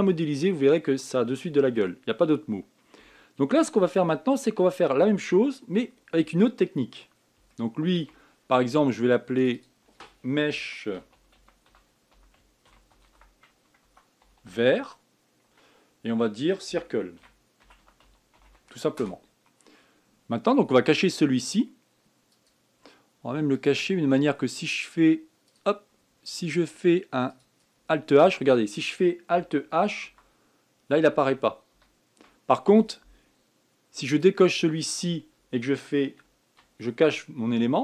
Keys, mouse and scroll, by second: 1.1-1.6 scroll down 4, 1.6-4.2 scroll up 2, 4.2-4.6 scroll up 3, 4.6 scroll down 4, 7.2-8.2 scroll down 6, 8.2-8.8 shift+middle drag, 8.8-10.1 shift+scroll up 1, 10.1 click, 10.3-13.4 drag, 15.1 r, 23.1 click, 24.3-27.3 drag, 28.0 click, 30.8 alt+h, 31.9 alt+h, 34.9 click.